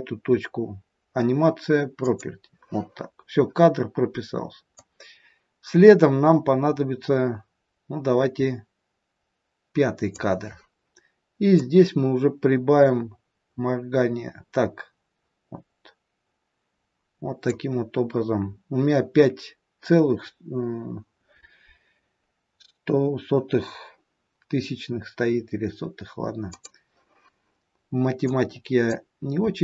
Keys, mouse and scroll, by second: 1.9 click, 4.6 click, 11.6 click, 26.6 click, 28.1 click.